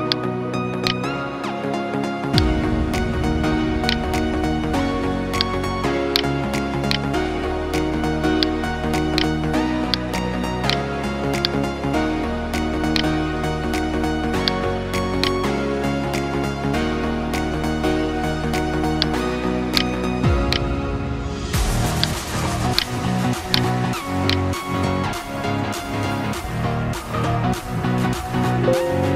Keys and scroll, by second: 0.2 ctrl+space, 0.7 ctrl+space, 4.5 ctrl+t, 4.9 ctrl+space, 5.4 ctrl+space, 6.0 space, 15.9 F9, 27.6 alt+BackSpace.